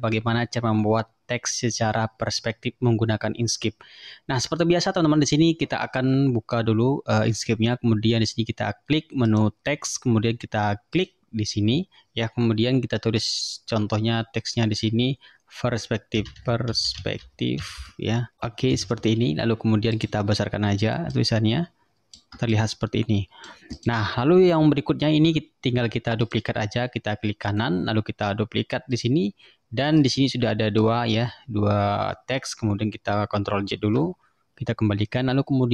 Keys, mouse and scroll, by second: 9.4 click, 11.0 click, 15.9-18.7 typing, 20.0 click, 21.2-22.4 ctrl+drag, 22.6-23.7 ctrl+drag, 23.8 click, 24.9-25.2 ctrl+scroll up 2, 26.3 click, 27.5 right click, 29.0 click, 30.1 click, 33.8 ctrl+z.